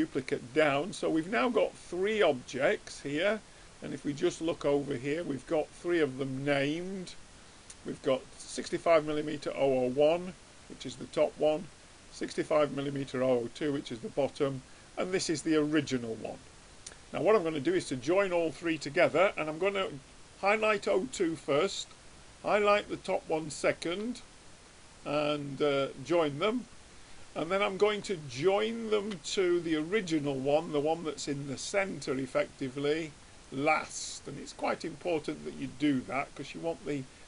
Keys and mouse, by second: 1.2-3.6 middle drag, 3.6-9.2 drag, 11.7-14.0 drag, 14.6-16.4 drag, 17.2-18.8 drag, 22.0-23.8 drag, 24.9-26.9 drag, 28.6-30.4 drag, 30.9-32.8 middle drag, 33.4-35.2 drag, 35.7-37.2 middle drag.